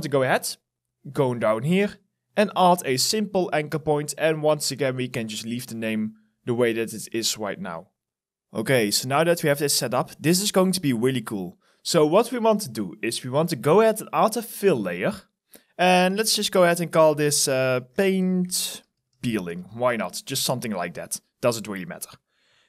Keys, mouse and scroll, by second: 16.4 double click, 17.3-20.2 typing.